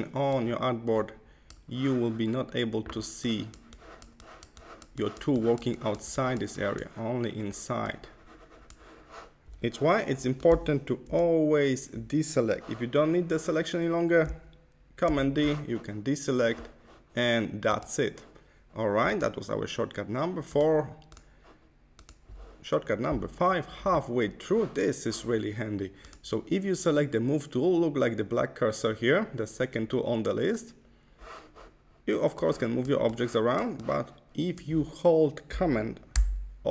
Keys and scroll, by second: 11.0 Left, 15.0 super+d.